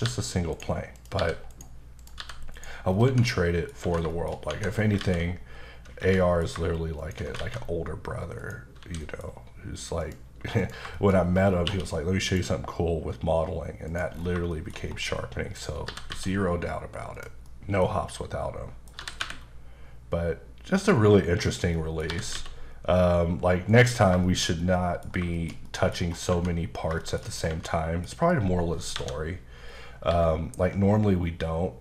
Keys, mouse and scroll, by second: 0.0 g, 0.5 right click, 1.0 click, 1.2 g, 1.5 right click, 2.0 click, 2.2 g, 2.5 right click, 2.9 scroll down 2, 3.1 Tab, 3.3 middle click, 3.8 Tab, 4.1 shift+middle click, 4.5 Tab, 4.7 scroll down 2, 5.0 alt+x, 6.0 Escape, 6.2 middle click, 7.0 shift+click, 8.4 click, 9.0 a, 9.0 middle click, 9.2-10.0 scroll up 2, 10.0 click, 10.6 click, 10.9 shift+middle click, 11.1-11.7 scroll up 5, 11.7 q, 12.3 click, 13.9 click, 14.1 scroll down 1, 14.5 shift+middle click, 14.8 scroll down 2, 15.1 middle click, 15.6 scroll up 2, 15.9 typing, 17.1 click, 17.4 middle click, 18.1 middle click, 19.0 typing, 21.4 click, 21.7 middle click, 22.1 typing, 23.7 click, 24.2 shift+middle click, 25.3 shift+middle click, 26.0-26.3 scroll up 2, 26.3 Tab, 27.0 shift+middle click, 27.3 scroll down 2, 27.5 Tab, 27.7 middle click, 28.9 KP_7, 29.7-30.1 scroll up 2.